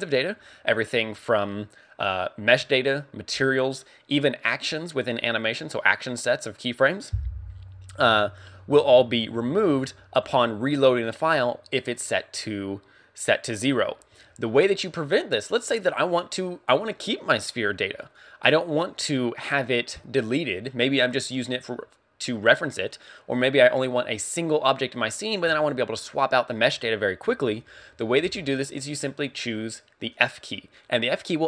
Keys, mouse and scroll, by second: 30.1 click.